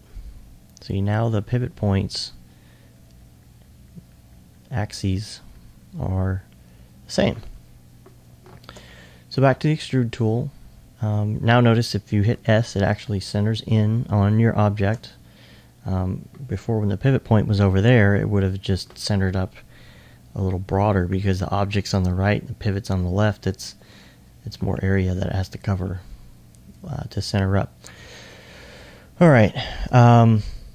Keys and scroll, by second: 12.3 s.